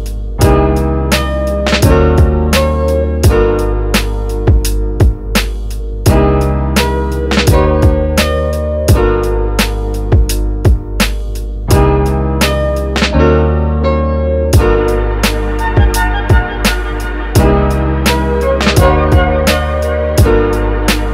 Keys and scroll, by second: 8.1 f.